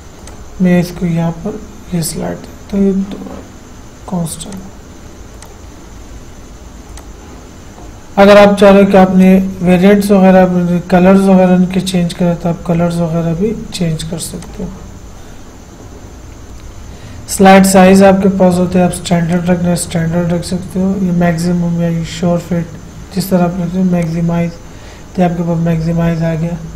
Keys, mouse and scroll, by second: 0.5 click, 4.8 click, 9.4 click, 14.6 click, 17.6 click, 24.2 click.